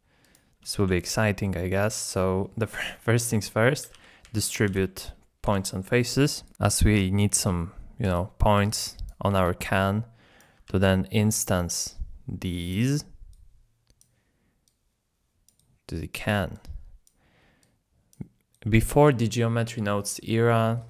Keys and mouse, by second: 0.2 click, 0.7 shift+a, 6.5 click, 7.8 click, 8.1 d, 8.1 click, 8.7 click, 8.7 d, 9.2 d, 9.3 d, 9.4-10.4 drag, 10.4-19.0 typing, 11.9 click, 13.3 click, 14.6-16.1 drag, 18.5 click.